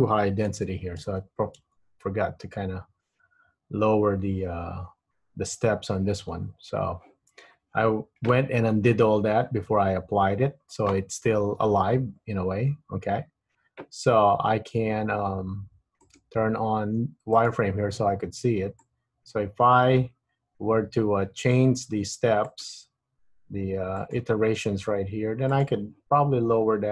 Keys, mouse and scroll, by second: 0.7 super+z, 1.2 super+z, 1.8 super+z, 11.7 Tab, 16.3 click, 18.9 click, 22.6 click, 24.2 click, 25.7 click.